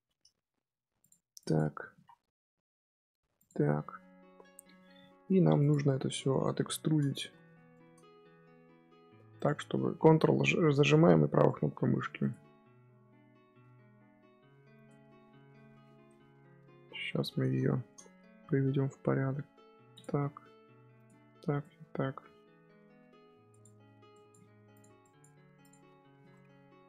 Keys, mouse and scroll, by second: 0.2 g, 1.3 click, 1.8 z, 2.3 g, 3.5-4.4 scroll down 5, 4.9 g, 6.4-9.3 shift+middle drag, 9.3 ctrl+right click, 11.3 ctrl+right click, 12.1 ctrl+right click, 14.7 ctrl+right click, 16.2 KP_7, 16.8-17.4 scroll down 2, 17.4 z, 17.6 shift+middle click, 17.9-19.3 scroll up 3, 19.3 g, 20.9 ctrl+right click, 21.4 ctrl+right click, 22.4 g, 24.0 click, 24.3 g, 24.9 click, 25.2 g, 25.7-26.1 scroll down 1, 26.1 z, 26.2 middle click, 26.8 scroll up 2.